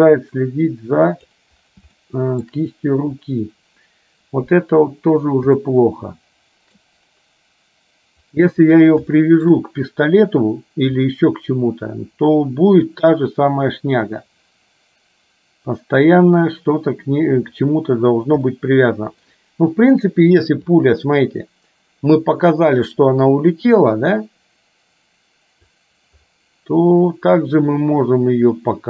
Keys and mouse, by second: 2.2 shift+middle click, 5.8-6.9 shift+middle drag, 9.3 shift+middle click, 18.7 shift+middle click, 21.0-25.9 drag.